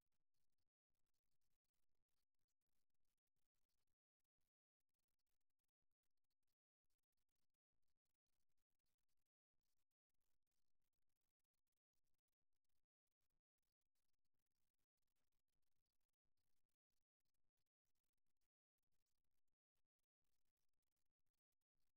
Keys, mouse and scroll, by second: 0.7-1.7 right drag, 1.9 x, 4.5-6.5 middle drag, 7.7 middle click, 8.6-10.6 right drag, 9.0 x, 10.7-12.5 middle drag, 13.7-15.5 right drag, 14.2 x, 15.5 middle click, 19.3 right click, 21.1 right click.